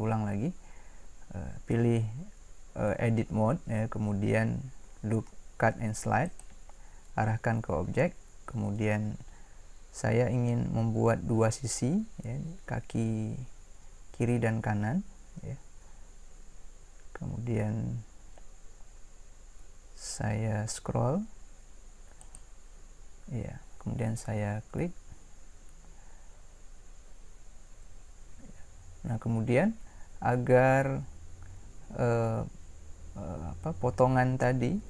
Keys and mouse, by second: 6.3-7.4 drag.